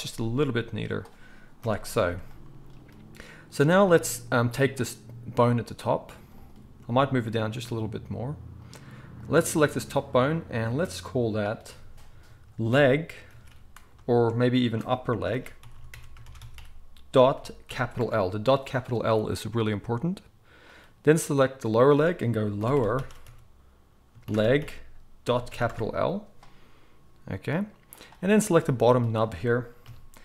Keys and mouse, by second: 1.6 KP_1, 6.3 click, 6.4-9.1 middle drag, 6.7 g, 9.1 click, 9.2-11.3 middle drag, 11.3-20.7 drag, 15.6 p, 20.7-21.7 middle drag, 21.7-28.0 drag, 28.0-30.2 middle drag, 29.8 KP_3.